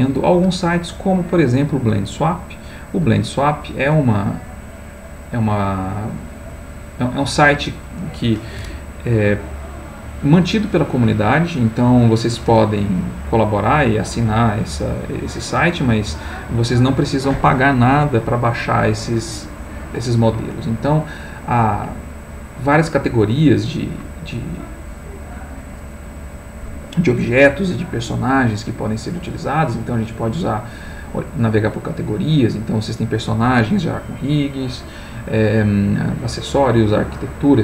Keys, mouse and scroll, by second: 3.5 middle click, 4.8-6.5 drag, 6.9 click, 24.5 click, 29.4 click.